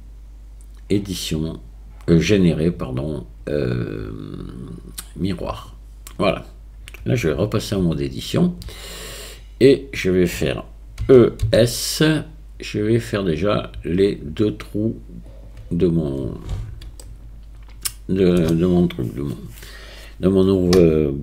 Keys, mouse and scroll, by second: 7.8 Tab, 11.0 e, 17.1-18.4 shift+drag.